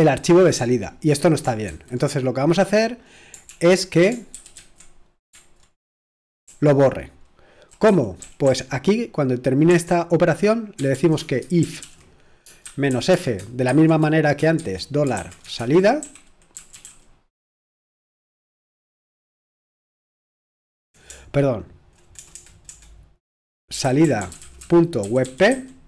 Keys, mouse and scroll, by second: 1.7 typing, 3.5-4.8 typing, 6.4 super+l, 7.1 c, 8.2 ctrl+w, 9.7 c, 10.9-16.7 typing, 21.1 BackSpace, 21.7 BackSpace, 21.8 BackSpace, 21.8 BackSpace, 23.5-25.8 typing.